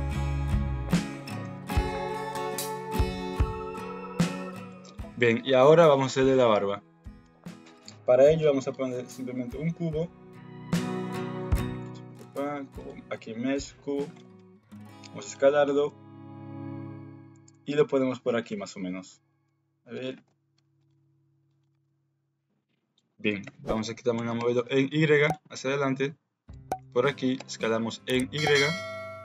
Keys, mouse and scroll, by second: 0.1-1.2 middle drag, 1.4 g, 2.7 middle click, 3.4 ctrl+z, 3.7 middle click, 5.0 KP_1, 5.5 a, 5.6 KP_Decimal, 7.1 shift+middle click, 9.1 shift+a, 14.1 alt+z, 14.4 s, 15.4 g, 18.4-21.6 typing, 22.4 alt+z, 23.4 KP_3, 24.1 g, 25.8 shift+click, 26.4 g, 27.0 s.